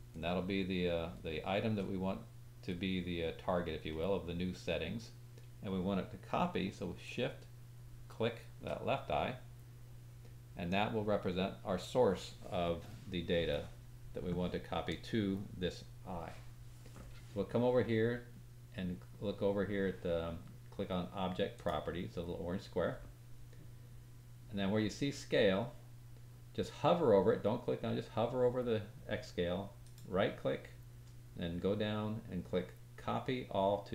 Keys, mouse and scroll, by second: 0.1 middle click, 0.2 click, 1.2-1.7 shift+middle drag, 7.4 shift+click, 7.9-8.6 shift+middle drag, 8.6-21.5 drag, 21.6-29.8 middle drag, 29.8 right click.